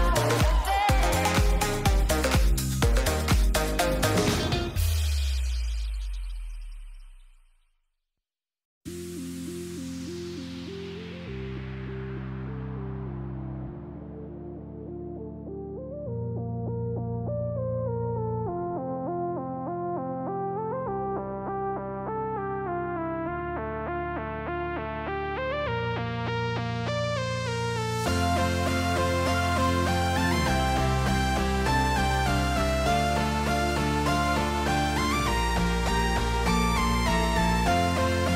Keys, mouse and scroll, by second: 1.1 click, 1.4 Tab, 2.0 Tab, 3.0 middle click, 5.7-6.7 shift+middle drag, 7.1 middle click, 7.5 ctrl+s, 7.9 shift+middle click, 8.6 click, 8.8 shift+middle click, 9.9 h, 10.3 middle click, 10.7 shift+middle click, 11.7 Tab, 12.7 shift+click, 15.7 middle click, 17.0 middle click, 18.4 middle click, 19.0 click, 19.5 shift+click, 22.2 middle click, 23.5 middle click, 24.5 click, 24.8 click, 25.3 middle click, 26.4 shift+a, 32.2 middle click, 32.7 click, 33.2 middle click, 34.0 middle click, 35.0 middle click, 38.0 ctrl+t.